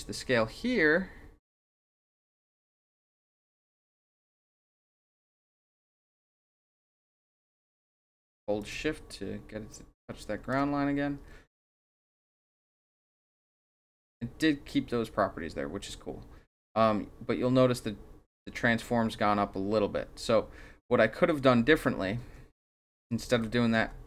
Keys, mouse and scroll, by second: 2.4-5.6 drag, 8.6-10.5 shift+drag, 12.1-21.4 drag, 22.2 ctrl+z, 22.6 ctrl+z, 23.3 ctrl+z, 23.8 ctrl+z.